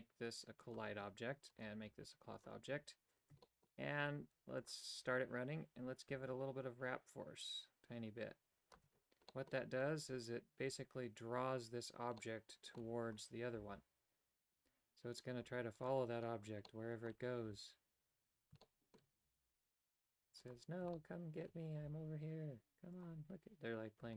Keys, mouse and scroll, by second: 0.6 click, 1.5 right click, 2.6 click, 3.6 shift+middle click, 4.6 click, 6.3-8.8 shift+drag, 9.5 middle click, 12.3 middle click, 13.4 right click, 13.7 g, 16.7 middle click, 18.7 shift+middle click, 19.4 g, 21.0 shift+middle click, 22.0 g.